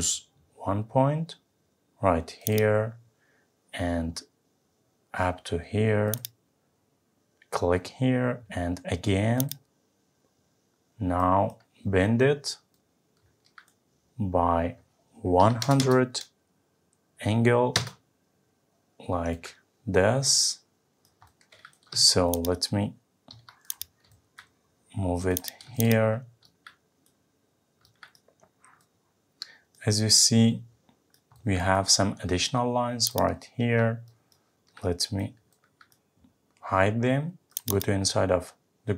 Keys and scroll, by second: 17.8 Return.